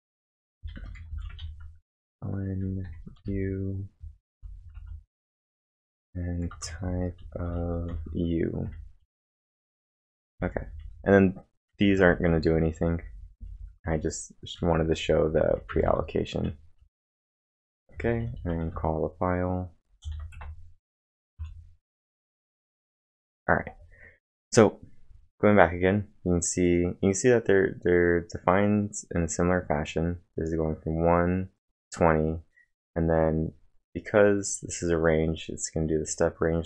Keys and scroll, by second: 0.0-5.3 typing, 6.4-8.6 typing, 11.3-13.7 typing, 15.5-16.2 typing, 16.8 ctrl+`, 17.7-19.0 typing, 20.3 Tab, 21.3 Return.